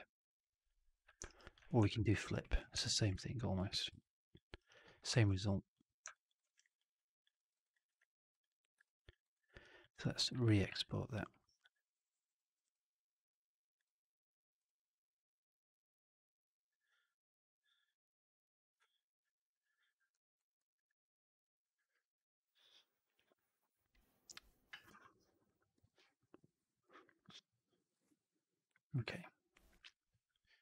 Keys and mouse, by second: 1.2 alt+right click, 1.4 alt+click, 1.8 4, 2.1 alt+right drag, 2.3 alt+middle drag, 2.8 shift+x, 3.2 alt+drag, 3.6 shift+x, 3.9-4.3 alt+drag, 4.5 alt+right drag, 4.7 alt+click, 5.0 alt+v, 6.1 alt+drag, 6.3 alt+right click, 6.5 alt+right drag, 6.7-7.2 drag, 7.3 middle drag, 7.5 right click, 7.7 click, 8.3-8.7 drag, 8.8 alt+drag, 9.2 alt+right click, 9.5 alt+drag, 10.7 shift+Tab.